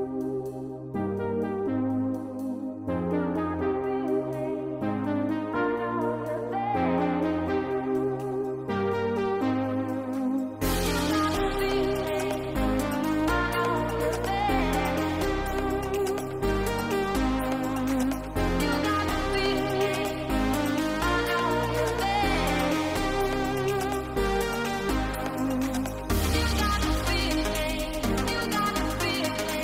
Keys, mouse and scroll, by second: 0.3 shift+middle click, 1.0-1.4 middle drag, 1.6 middle click, 2.1 shift+middle drag, 2.6 click, 2.8 middle click, 3.2 Tab, 4.0 shift+middle click, 4.8 click, 5.2 shift+middle click, 6.6 ctrl+click, 7.2 shift+middle click, 8.9 shift+click, 10.0 shift+click, 10.9 shift+middle click, 11.6 shift+click, 14.1 ctrl+click, 15.1 middle click, 16.8-17.5 drag, 17.9-18.6 drag, 20.1 click, 25.5-27.6 drag.